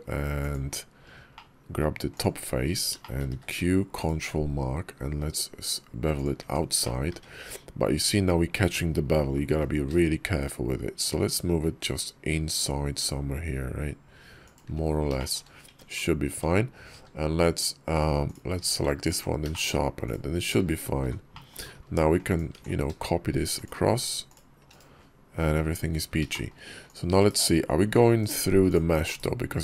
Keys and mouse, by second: 0.5 Tab, 1.2 click, 2.0 click, 2.9 shift+click, 3.1 q, 6.3 Tab, 6.7 click, 7.0 `, 9.8 g, 15.0 shift+click, 15.5 Tab, 16.1 Tab, 16.8 q, 18.4 q, 19.4 shift+click, 19.9 click, 20.9 h, 21.2 click, 22.1 click, 22.5 alt+x, 26.2 shift+drag, 26.7 click, 27.0 /, 28.0 /, 28.5 click, 28.9 /.